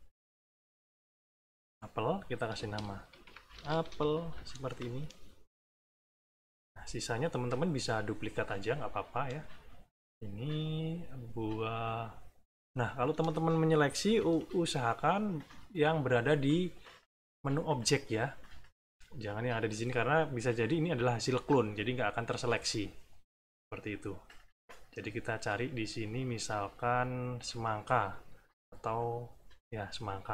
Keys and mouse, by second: 1.5 click, 2.0 click, 2.8-4.3 typing, 5.7 click, 7.0 middle click, 8.7 middle click, 9.9 click, 12.7 middle click, 13.2 middle click, 14.0 -, 16.4 click, 23.9 click, 27.5 click.